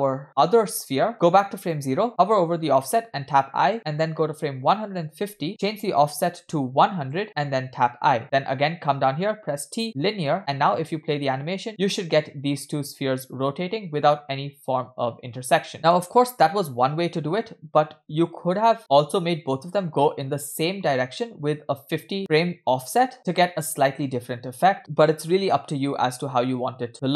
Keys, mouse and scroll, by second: 1.6 click, 3.7 i, 4.7 click, 5.9 Right, 5.9-7.2 drag, 6.9 0, 7.9 i, 9.4 t, 10.6 space, 15.7 middle click, 18.4 space, 18.4 space, 18.8 space, 26.4 space.